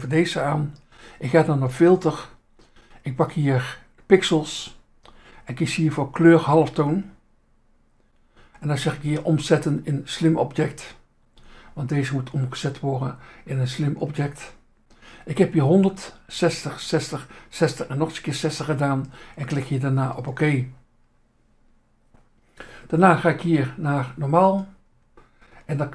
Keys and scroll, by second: 0.4 Insert, 7.1 Insert, 11.3 Insert, 11.9 Insert, 14.1 Insert, 20.7 Insert, 24.5 Insert.